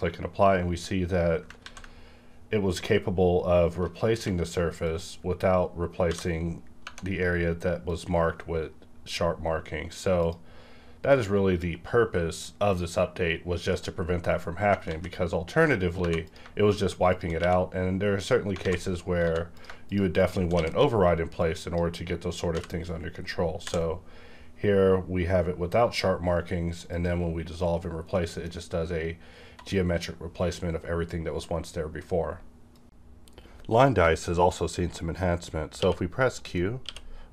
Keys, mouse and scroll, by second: 1.6 ctrl+z, 4.1 q, 4.8 click, 6.0 v, 6.8 Tab, 7.9 click, 10.2 click, 14.7 click, 14.8 ctrl+z, 16.0 2, 16.2 click, 16.6 shift+click, 17.4 q, 18.2 click, 18.6 alt+a, 19.2 3, 19.5 click, 19.9 shift+click, 21.4 click, 22.5 v, 22.8-23.2 scroll up 1, 23.2-23.6 scroll down 1, 23.6 d, 24.0-24.3 scroll down 1, 24.3-26.5 scroll up 1, 26.9 click, 28.1 middle click, 36.9 q.